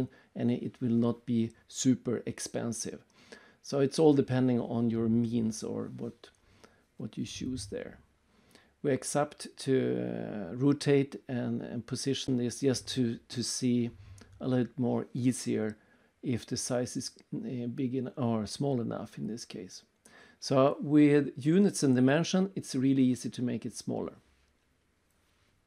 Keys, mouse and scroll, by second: 1.0 click, 2.4 click, 2.7 right click, 3.1 middle click, 3.5 right click, 4.0 middle click, 5.0 right click, 5.5 middle click, 7.1 click, 8.9 click, 9.8 click, 10.8 right click, 12.9 click, 13.6-14.6 typing, 14.7 Return, 16.4 click, 16.8 right click, 17.4 middle click, 17.7 middle click, 17.8 right click, 19.4 middle click, 19.9 right click, 20.2 middle click, 21.7 click, 24.6 click, 25.4 click.